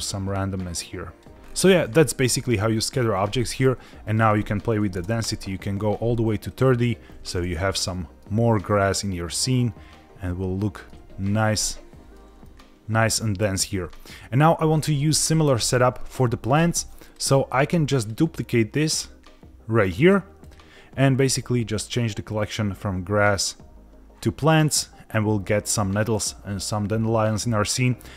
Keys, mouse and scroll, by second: 1.3 scroll down 2, 1.4-3.1 scroll up 4, 4.1-5.5 drag, 6.5 click, 7.4 middle click, 8.7-10.9 middle drag, 11.2 scroll up 1, 11.6-12.1 shift+middle drag, 12.4 middle click, 13.1-13.9 scroll down 1, 13.9 middle click, 17.0 click, 18.0-19.2 drag, 20.0 click, 20.4 click, 21.9-23.6 drag.